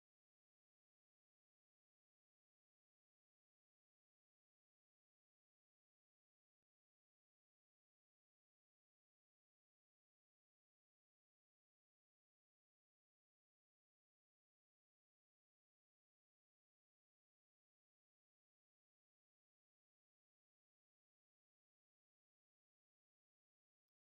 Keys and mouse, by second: 0.5-3.4 drag, 3.6 click, 4.4-5.7 drag, 6.2 click, 6.4 g, 7.6-11.4 drag, 12.1 click, 12.2 x, 13.1-14.8 drag, 15.6 click, 15.8 g, 17.2-21.4 drag, 21.3 space, 23.7 space.